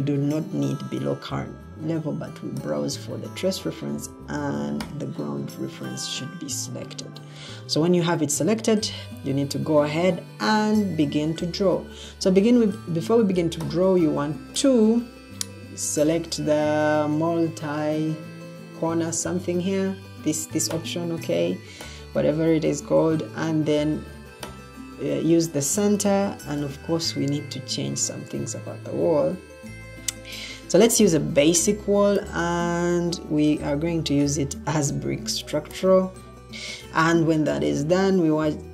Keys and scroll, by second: 26.3 ctrl+t, 33.4-34.7 typing, 36.3 typing.